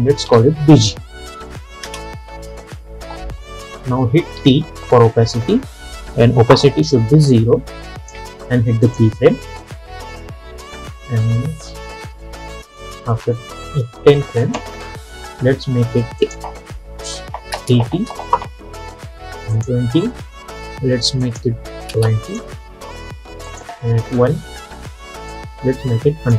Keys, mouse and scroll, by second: 0.4 shift+b, 0.9 g, 1.9 Return, 4.5 t, 7.0-8.9 drag, 10.4 =, 14.5 click, 18.0 Return, 19.6-26.3 drag.